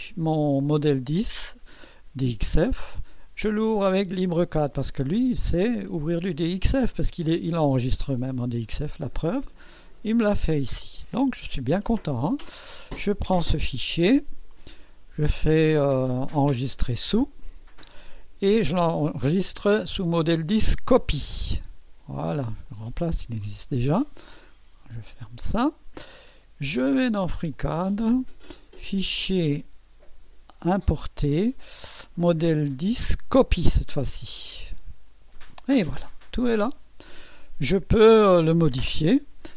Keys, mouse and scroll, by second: 6.8 click, 8.6-9.0 scroll down 2, 9.5-9.8 scroll down 2, 10.3-10.6 scroll up 2, 12.2 scroll down 2, 12.7 scroll up 2, 14.5 click, 17.1 click, 20.3 click, 21.6 click, 22.7 click, 25.2 click, 27.5 click, 28.7 click, 30.8 click, 33.3 click, 34.4 click, 36.2-36.5 scroll up 1, 36.7-37.0 scroll down 1.